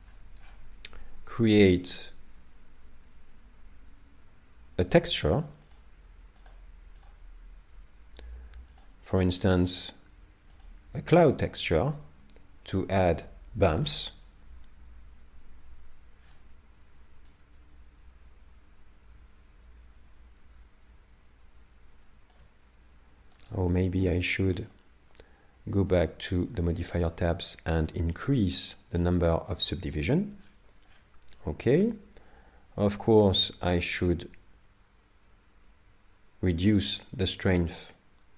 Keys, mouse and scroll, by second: 1.8 click, 5.7 click, 7.0 click, 8.7 click, 11.3 middle click, 16.2 scroll down 8, 17.3 click, 23.4 right click, 23.5 right click, 24.6 click, 25.9 click, 26.8-28.3 scroll up 6, 28.3 click, 29.2 click, 30.4-32.1 scroll down 15, 32.9 shift+click, 38.0 shift+click.